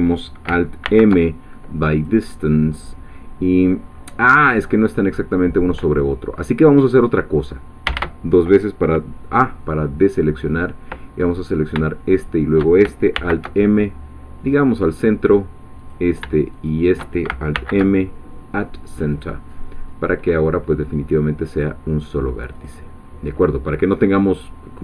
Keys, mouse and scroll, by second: 0.8 alt+m, 2.0 click, 4.3-4.7 scroll up 2, 5.4-6.3 scroll down 2, 6.3-6.8 scroll up 2, 6.8 scroll down 2, 7.9 a, 11.5 click, 12.2 shift+click, 13.1 alt+m, 14.5-16.1 drag, 16.7 shift+click, 17.5 alt+m, 19.1 click, 19.8 scroll down 2, 20.2-20.7 scroll up 2, 20.7-21.5 scroll down 2, 21.5 click, 22.7 click, 22.9-23.3 scroll down 2.